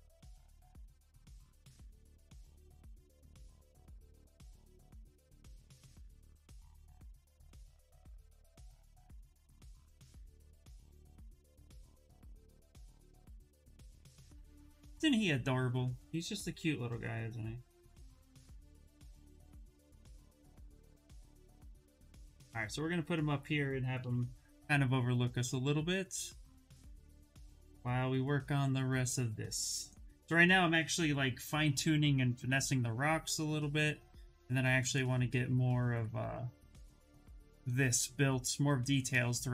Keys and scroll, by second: 23.7 shift+s, 35.6 shift+f.